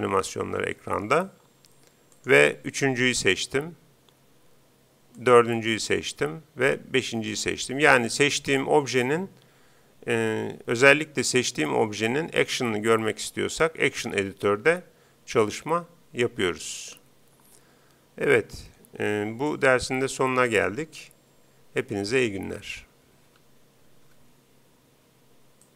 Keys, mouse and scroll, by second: 2.1-3.9 right drag, 5.2-6.9 right drag, 7.3-9.0 right drag, 19.5-21.2 drag.